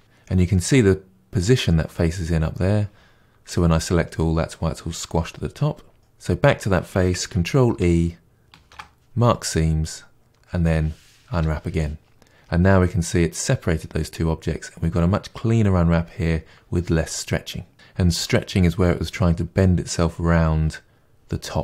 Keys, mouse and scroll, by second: 3.4 a, 6.0 click, 9.4 ctrl+e, 10.5 a, 12.1 u.